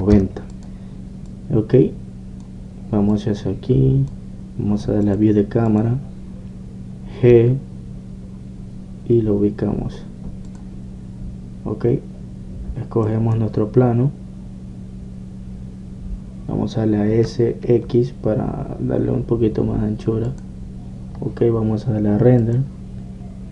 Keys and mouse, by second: 1.7-6.1 drag, 6.8 click, 11.6-13.5 drag, 21.4-23.5 drag.